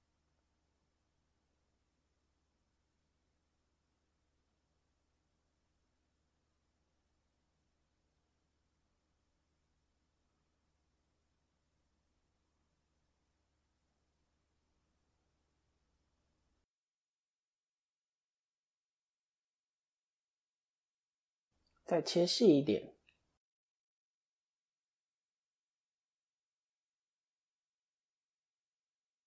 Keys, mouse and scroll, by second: 0.8 KP_3, 3.2 click, 4.0 shift+click, 6.0 s, 9.9 KP_1, 11.0 scroll up 1, 11.1 middle click, 12.6 KP_1, 13.6 click, 17.6 KP_3, 18.6 KP_1, 20.2 KP_3, 21.7 ctrl+r, 25.3 click, 26.0 shift+click, 26.9 s.